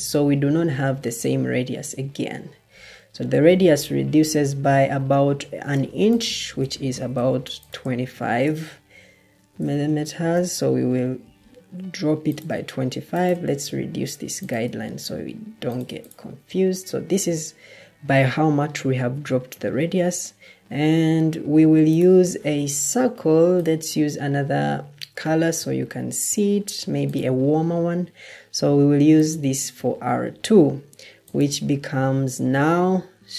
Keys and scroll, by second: 6.8 ctrl+d, 8.1 shift+Tab, 9.2-9.8 typing, 10.2 Return, 11.7-12.5 typing, 16.3-17.1 typing.